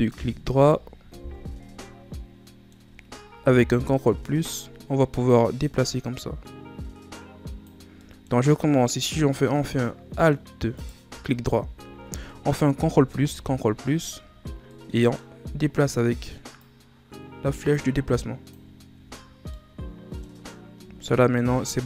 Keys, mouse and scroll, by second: 0.4 ctrl+KP_Add, 2.1-3.7 middle drag, 3.7 ctrl+KP_Add, 5.2-8.0 drag, 8.0 middle click, 8.5-9.7 scroll up 2, 9.7 scroll down 1, 10.1 middle click, 10.7 right click, 11.2 alt+right click, 12.8 ctrl+KP_Add, 13.3 ctrl+KP_Add, 14.6-16.5 middle drag, 16.5-18.9 drag, 18.9 Tab, 19.5 middle click, 20.3-20.7 scroll up 1, 20.7 Tab, 21.5-21.8 middle drag.